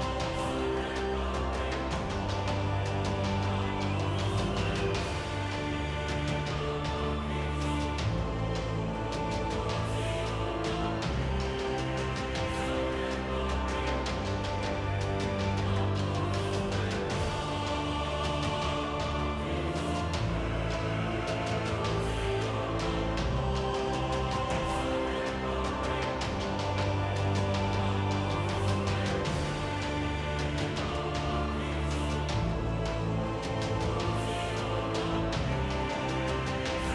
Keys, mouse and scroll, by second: 1.3 KP_1, 1.6 g, 2.5 KP_1, 2.6 g, 5.2 ctrl+Tab, 5.8-7.3 typing, 6.4 ctrl+z, 8.3 Tab, 10.9-11.9 middle drag, 11.9 KP_3, 17.8 ctrl+Tab, 18.2 right click, 19.2 g, 20.2 z, 20.4 Tab, 23.3 z, 23.4 z, 23.6 Tab, 23.8 Tab, 27.4 Tab, 29.4 shift+e, 29.7 Tab, 30.1 t, 32.0 Tab, 32.7 z, 33.0 z, 34.5 shift+e, 34.9 Tab.